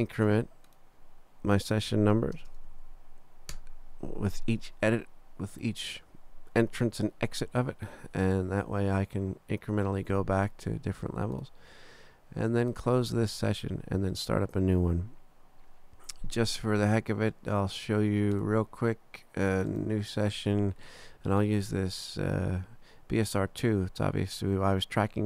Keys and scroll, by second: 1.6-3.2 typing.